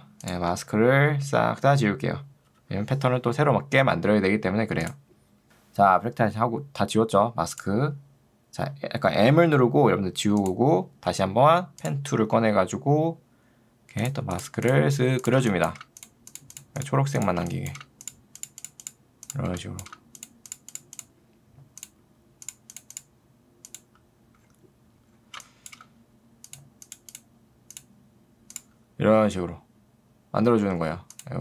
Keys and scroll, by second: 15.4 space, 25.4 space.